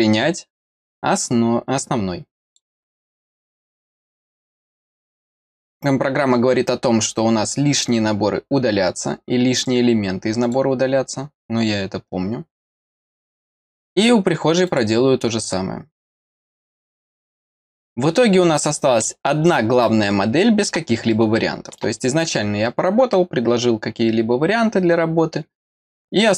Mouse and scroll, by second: 2.4 click, 10.4 click, 13.3 click, 14.6 click, 16.3 click, 18.5 click, 19.8 middle click, 21.1 middle click.